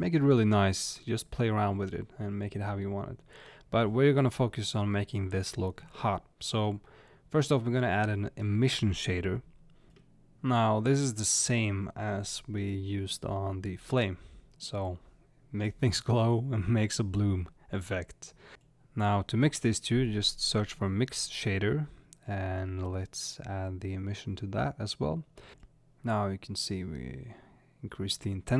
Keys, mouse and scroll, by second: 14.7 click, 21.2 click, 23.6 click, 25.1-28.5 drag.